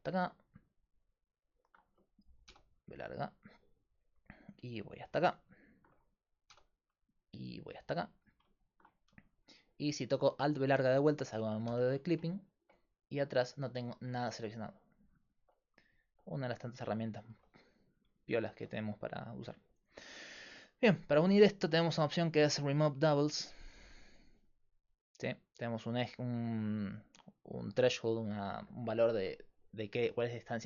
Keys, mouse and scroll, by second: 1.0 middle click, 2.5 b, 5.4-9.7 middle drag, 6.5 b, 11.7 alt+b, 15.2-21.2 middle drag, 23.9-25.6 drag.